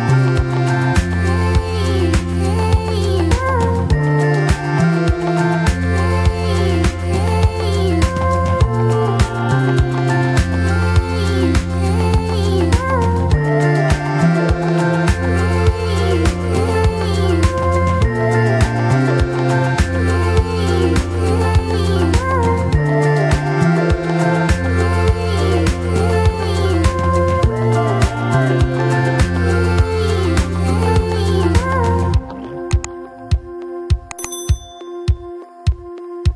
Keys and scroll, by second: 1.6 ctrl+a.